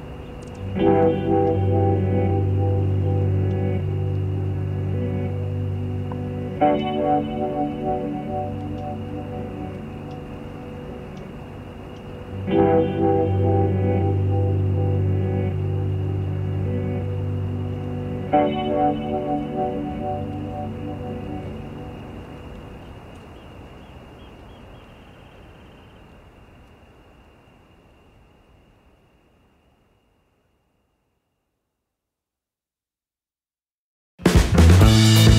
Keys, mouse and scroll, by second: 0.6 shift+click, 1.0 shift+click, 3.9 shift+click, 6.6 click, 7.6 middle click, 8.5 click, 8.9 middle click, 10.0 click, 11.2 Delete, 12.2-13.6 drag, 14.9 click, 16.4 ctrl+z, 17.2 ctrl+a, 18.1 click, 19.7-23.1 ctrl+drag, 23.8 KP_Add, 24.4 middle click, 26.2 click, 26.9-28.5 ctrl+drag, 29.4-31.0 drag, 32.1 click, 34.4 click.